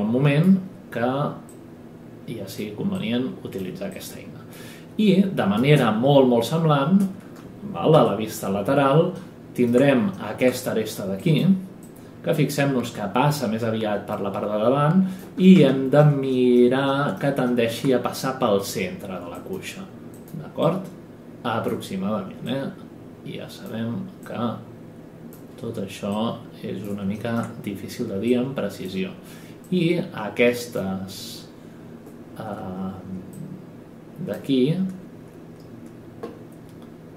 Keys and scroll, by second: 5.6 space, 6.9 space.